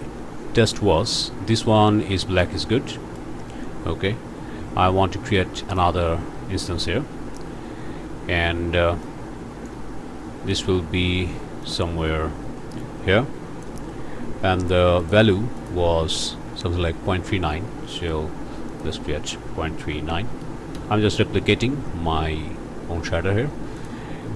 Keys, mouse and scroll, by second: 1.9 click, 2.9 click, 5.7 click, 6.8 click, 9.0 click, 11.6-13.8 drag, 15.0 click, 15.6 click, 17.9 click, 18.7 click, 19.5 KP_Decimal, 19.8 KP_3, 20.1 KP_9, 20.7 KP_Enter, 23.8 click.